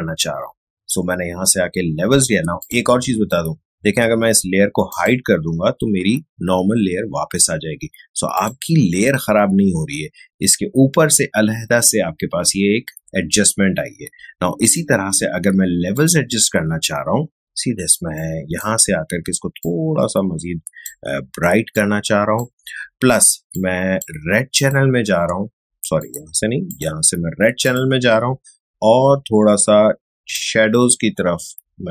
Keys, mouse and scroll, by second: 2.6 click, 4.9 click, 8.3 click, 14.6-24.6 drag, 30.3-31.9 drag.